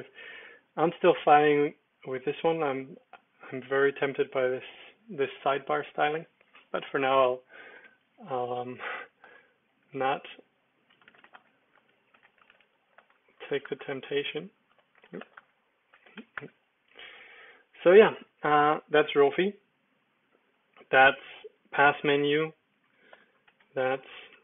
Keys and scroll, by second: 6.9 Escape, 7.8 x, 8.5 super+l, 8.9-16.6 typing, 9.2 Return, 12.2 Escape, 13.6 Return, 23.0 super+p, 23.6 Escape, 24.3 alt+space.